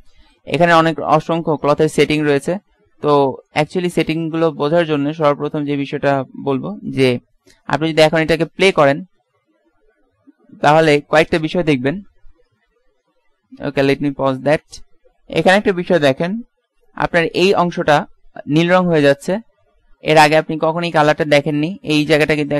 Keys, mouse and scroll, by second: 6.1-7.9 middle drag, 11.8 alt+a.